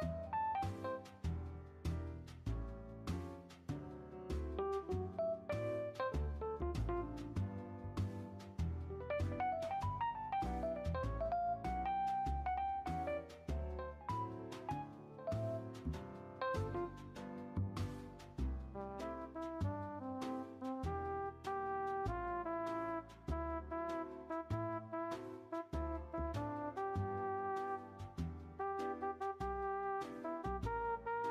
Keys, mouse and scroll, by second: 0.5 r, 3.8-4.6 middle drag, 4.6-5.0 drag, 5.0 space, 6.7-8.5 middle drag, 8.5-8.9 scroll up 1, 8.9 r, 11.9-12.9 middle drag, 12.9 scroll up 1, 13.0-14.4 middle drag, 14.4 r, 17.8 middle drag, 18.1 scroll up 1, 18.9-20.4 shift+drag, 20.4-20.8 middle drag, 20.8-21.2 scroll up 1, 24.8-25.9 middle drag, 25.9 r, 27.7 scroll up 1, 27.8-29.1 middle drag, 29.1-29.6 shift+drag, 29.6-30.9 scroll down 1, 30.9 i.